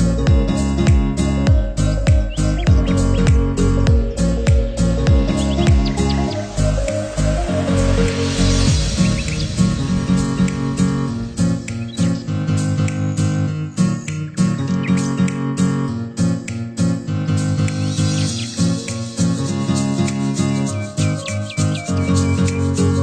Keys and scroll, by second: 2.1 ctrl+z.